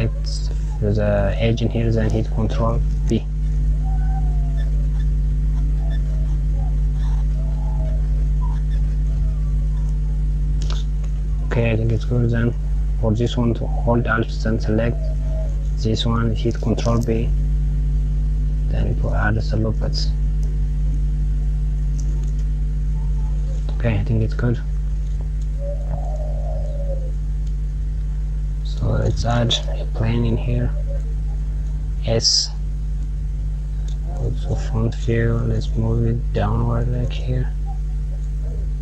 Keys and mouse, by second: 2.7 ctrl+b, 14.1 alt+Left, 16.1 ctrl+b, 22.1 Tab, 23.1 click, 24.3 click, 27.1 middle click, 28.9 shift+a, 34.0 KP_1, 37.4 click, 38.2 click.